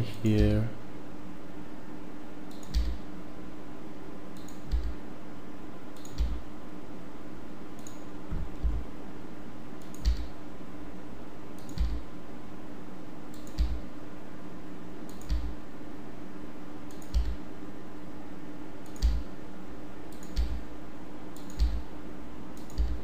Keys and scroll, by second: 0.4 e, 2.7 e, 4.7 e, 6.1 e, 8.6 e, 10.1 e, 11.8 e, 13.5 e, 15.3 e, 17.1 e, 19.1 e, 20.3 e, 21.6 e, 22.7 e.